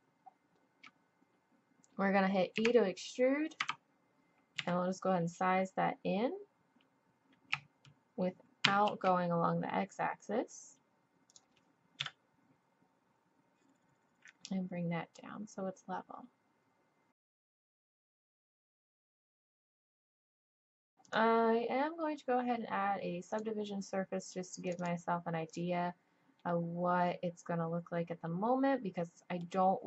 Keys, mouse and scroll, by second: 2.5 e, 4.6 s, 12.0 KP_3, 15.5 click, 18.5 s, 18.8 click, 19.9 a, 20.0 a, 20.1 s, 21.0-23.0 drag, 24.7-27.9 drag, 27.9 middle click.